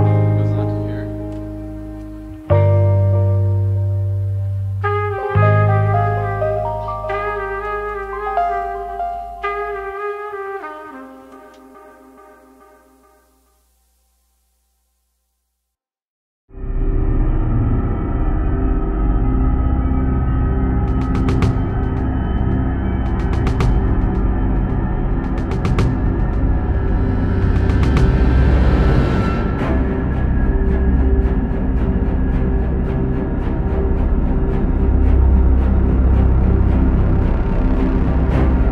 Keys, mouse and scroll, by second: 0.0 e, 0.7 g, 2.5 r, 3.3 s, 4.0 g, 4.7 middle click, 5.0-5.5 scroll down 1, 6.9 KP_3, 7.4 e, 8.0 e, 8.7 g, 10.5-12.0 middle drag, 12.0 click, 12.3-13.8 middle drag, 14.0-15.7 middle drag, 15.7-16.1 scroll up 1, 16.1 shift+click, 16.5 KP_1, 16.8-17.1 scroll down 2, 17.1-17.7 shift+middle drag, 17.7 f, 18.0 alt+s, 19.8 alt+s, 20.3-21.4 middle drag, 21.4 s, 22.9 middle click, 23.1-24.1 scroll down 1, 24.1 alt+s, 26.2 alt+s, 26.2 alt+s, 26.5 middle click, 27.1 click, 27.9 KP_3, 28.6 g, 29.3-31.0 middle drag, 31.0 g, 32.2 KP_3, 32.5 g, 33.5 r, 34.1 middle click, 35.0 KP_1, 35.5-36.7 middle drag, 36.7 KP_7, 37.1 shift+z, 37.7 r.